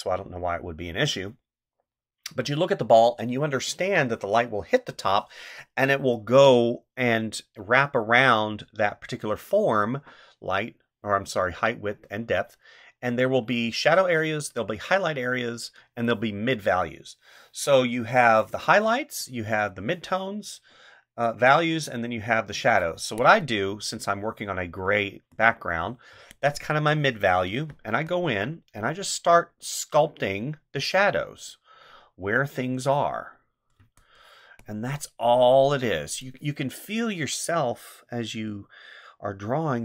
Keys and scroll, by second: 22.9 space, 26.1 space, 27.8 space, 33.8 space.